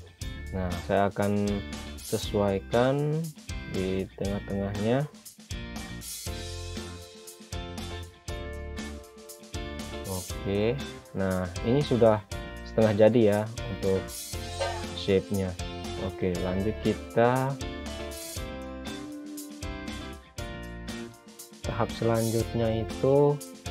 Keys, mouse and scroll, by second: 0.4 click, 3.3-4.0 scroll up 1, 5.1 click, 10.8-11.4 scroll down 1, 11.4 click, 18.0 scroll down 1, 18.4 click, 19.3-20.7 scroll up 1, 20.7 click, 23.6 scroll down 1.